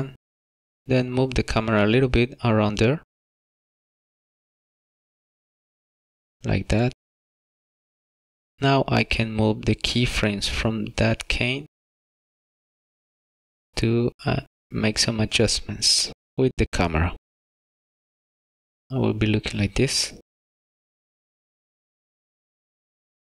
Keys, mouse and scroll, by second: 2.3 click, 7.0 middle click, 7.7 shift+middle click, 8.9 middle click, 11.4 click, 19.1 click, 20.4 click.